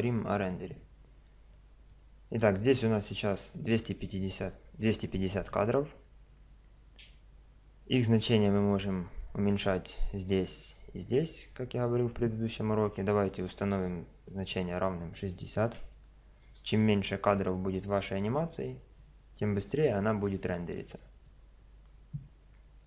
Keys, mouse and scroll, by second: 1.9-3.7 middle drag, 5.5-7.3 drag, 14.3-16.2 drag, 18.3-19.8 middle drag, 19.8 Home, 19.8 click, 22.5 click.